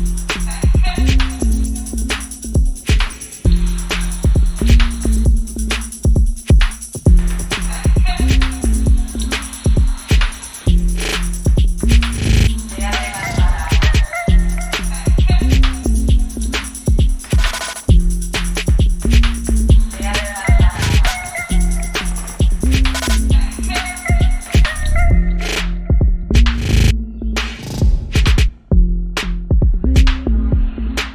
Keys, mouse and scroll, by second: 0.0 right click, 0.6 click, 5.1-9.3 drag, 9.3 p, 10.2 click, 11.5 shift+a, 14.3 click, 15.5 click, 16.7-18.2 drag, 20.3-21.3 typing, 23.2-29.2 drag, 29.2 c, 30.3-31.1 drag.